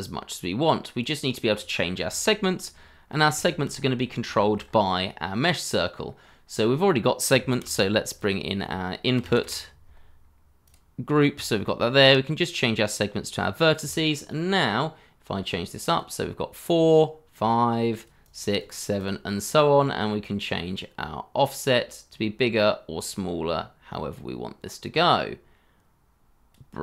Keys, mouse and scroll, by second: 1.8 scroll down 1, 2.1 shift+middle click, 2.7 scroll down 1, 3.0 scroll up 1, 3.3 shift+middle click, 3.7 scroll up 1, 4.2 shift+middle click, 4.6 scroll up 1, 7.5 shift+a, 9.1 typing, 16.7-18.2 scroll down 1, 18.2 double click.